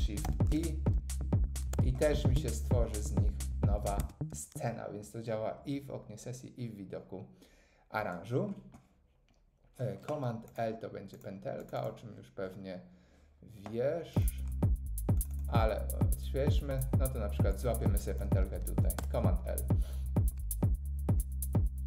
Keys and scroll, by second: 0.2 shift+super+i, 1.6 Tab, 19.0 super+l.